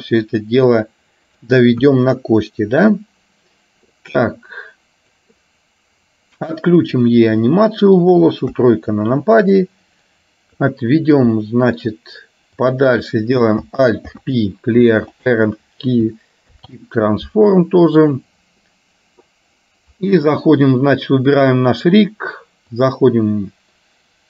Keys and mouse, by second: 0.9 click, 1.9 KP_1, 4.4-5.4 drag, 7.0 click, 7.5 middle click, 8.6 KP_3, 9.6-10.6 drag, 11.5 shift+middle click, 12.6 click, 14.1 alt+p, 16.5 alt+p, 21.4 click, 22.9-24.2 drag.